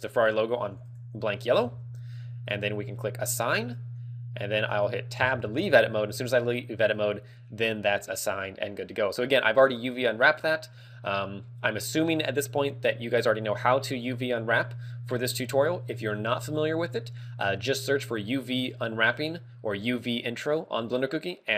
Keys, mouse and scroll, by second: 1.5 click, 3.3 click, 6.1 Tab, 10.3 Tab, 10.9-11.3 scroll down 4, 11.3-11.9 scroll up 5, 16.0 Tab.